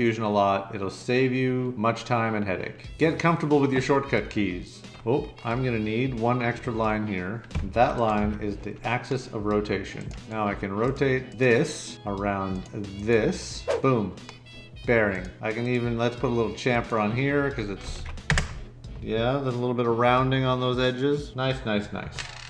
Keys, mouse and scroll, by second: 7.8 Escape, 8.2 x, 17.6-18.3 typing.